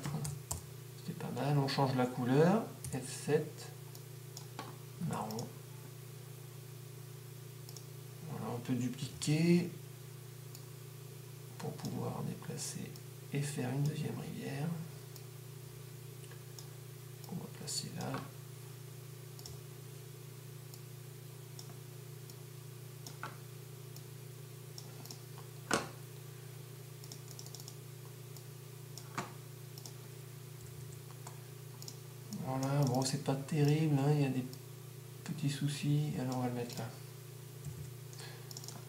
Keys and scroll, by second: 0.0-1.0 typing, 30.9-31.6 typing, 37.9 -, 38.1 -.